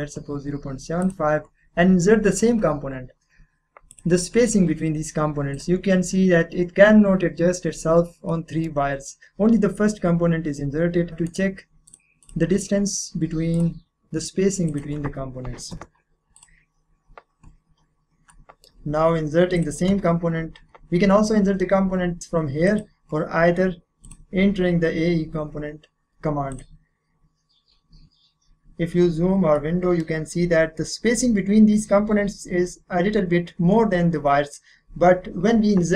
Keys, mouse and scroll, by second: 3.9 click, 8.3 middle click, 8.8-10.1 scroll up 1, 11.1 click, 11.3 right click, 11.9 click, 15.7 5, 16.3 click, 18.3 middle click, 18.8-19.5 scroll down 1, 19.5 click, 22.2 click, 26.5 click, 29.2-29.5 scroll down 1, 29.5-31.7 middle drag.